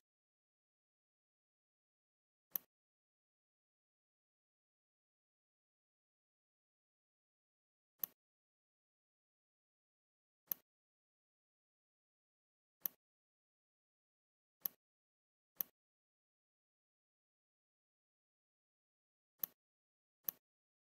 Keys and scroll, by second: 3.7 ctrl+alt+d, 4.2 ctrl+alt+d, 4.3 typing.